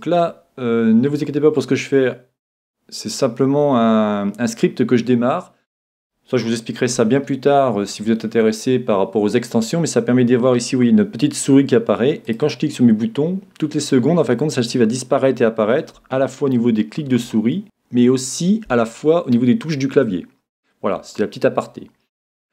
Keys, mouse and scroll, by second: 5.2-8.9 middle drag, 12.3 click, 17.1 e.